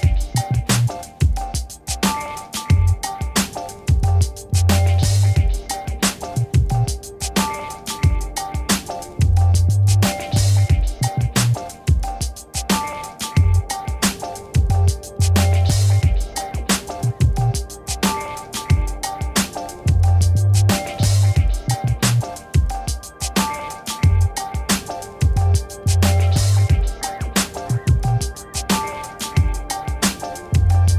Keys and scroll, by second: 0.9 6, 1.7 Return, 2.6 ctrl++, 4.0 ctrl++, 4.4 space, 13.7-14.7 typing, 19.0 space, 19.7 b, 19.9 o, 20.2 x, 20.9 Return.